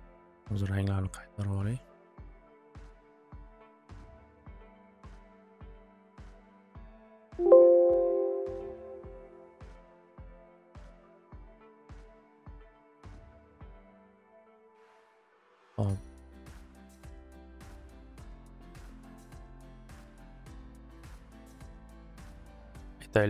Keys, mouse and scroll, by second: 1.4-4.5 drag, 5.0 click, 6.8 right click, 7.3 click, 8.1 click, 15.5 click, 16.4 click, 17.3 click, 18.4-19.2 typing, 18.4 click, 18.6 click.